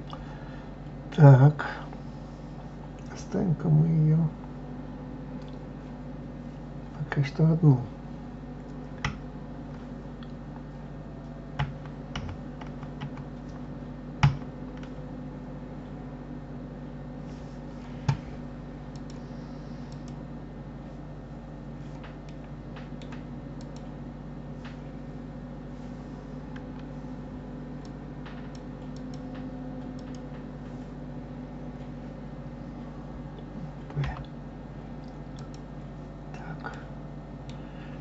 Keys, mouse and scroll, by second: 0.1 scroll up 2, 9.0 KP_Divide, 11.5 KP_Divide, 18.9-21.9 drag, 22.2-23.6 middle drag, 23.6 click, 27.8-32.0 drag, 36.7-38.0 middle drag.